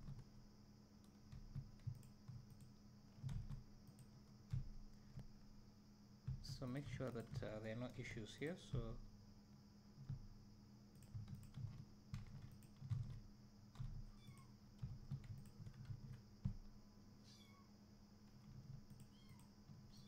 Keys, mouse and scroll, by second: 2.6 click, 4.0 ctrl+e, 5.4-5.7 scroll up 1, 6.4 1, 6.8 click, 7.2 shift+click, 8.8 `, 11.1 click, 11.5 shift+click, 13.0 alt+a, 14.4 click, 15.0 2, 15.5 alt+click, 16.1 ctrl+x, 19.0 alt+click.